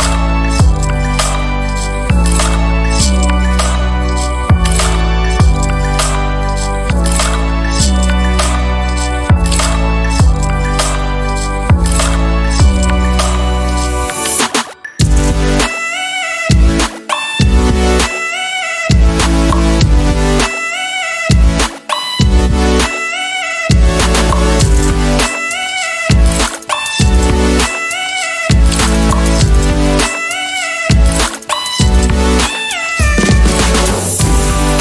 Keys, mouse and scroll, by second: 1.2 click, 1.9 space, 2.6 ctrl+scroll down 2, 3.7-4.8 ctrl+shift+drag, 5.8 ctrl+shift+g, 8.6 click, 11.9-13.4 ctrl+shift+drag, 15.1-18.7 ctrl+drag, 19.1 ctrl+Up, 20.2 Up, 21.9 click, 24.3 KP_5, 25.7-26.9 shift+drag, 27.1 shift+click, 29.2 ctrl+shift+click, 30.8 shift+click, 31.7 shift+click, 32.7-34.4 shift+drag.